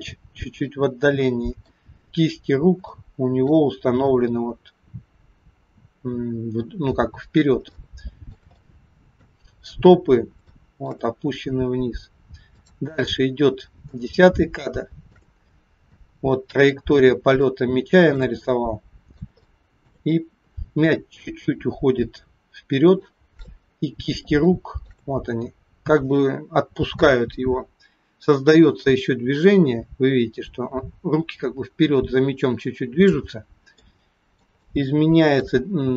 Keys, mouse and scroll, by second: 0.6 middle click, 2.0-2.9 scroll up 2, 3.0 shift+middle click, 7.3-7.7 scroll down 2, 7.8 middle click, 8.5 shift+middle click, 10.1 scroll up 2, 10.5 shift+middle click, 12.6 click, 13.7-14.3 scroll down 2, 14.5 shift+middle click, 15.4-16.0 scroll down 2, 16.0 middle click, 17.0-17.4 scroll down 1, 17.5 middle click, 18.5 middle click, 19.4 middle click, 19.4 shift+scroll up 1, 20.2-21.6 scroll up 2, 23.0 shift+middle click, 23.0-23.4 shift+scroll up 1, 23.8-24.4 scroll up 6, 24.5 shift+middle click, 29.4 click, 33.8 middle click, 34.6 shift+middle click.